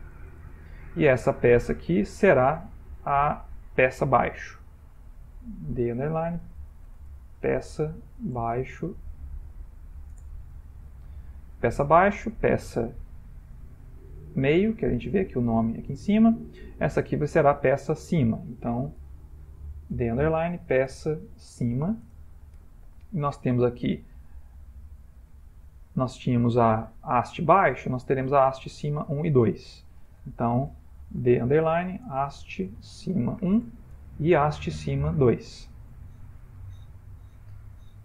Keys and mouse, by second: 1.9 click, 4.7 F2, 12.5 click, 17.9 click, 19.0 F2, 24.3 click, 26.0 click, 28.1 click, 30.1 F2, 35.0 click, 36.4 F2.